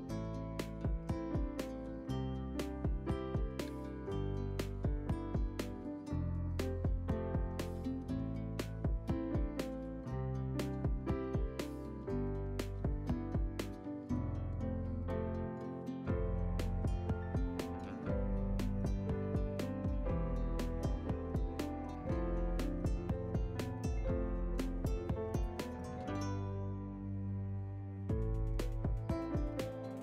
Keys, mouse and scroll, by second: 4.4 click, 9.1 click, 12.4 click, 19.3-19.7 scroll down 3, 19.5 middle click.